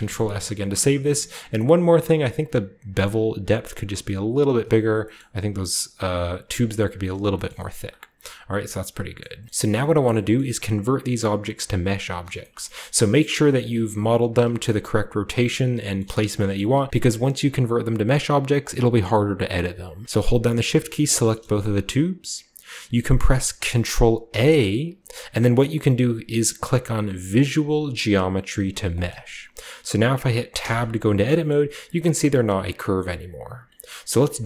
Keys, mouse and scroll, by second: 2.3-4.5 shift+drag, 4.9 g, 4.9 shift+middle click, 6.3 a, 6.4-6.8 scroll down 1, 6.8-7.3 scroll up 1, 7.3 shift+middle click, 7.3 shift+click, 7.4-8.6 ctrl+shift+middle drag, 8.5 scroll down 1, 9.1-9.7 middle drag, 9.2 scroll up 1, 9.4 Tab, 9.4 scroll down 1, 9.4 z, 9.6 a, 10.3-12.0 middle drag, 10.4-12.0 scroll up 1, 12.0 scroll down 1, 12.1 shift+middle click, 12.5 shift+middle click, 12.5-13.3 shift+scroll up 1, 12.8-16.3 shift+middle drag, 13.8 Tab, 14.4 r, 16.6 Tab, 16.9-18.9 scroll down 1, 18.9-19.9 scroll up 1, 19.9 scroll up 1, 20.0-23.1 shift+middle drag, 24.2 ctrl+a, 28.8 click, 30.5 Tab, 31.0-32.3 scroll down 1, 31.4 middle click, 31.9 a, 32.9-33.6 scroll up 1, 32.9-34.4 middle drag, 33.6 Tab, 33.6-34.0 scroll up 1, 34.3 g.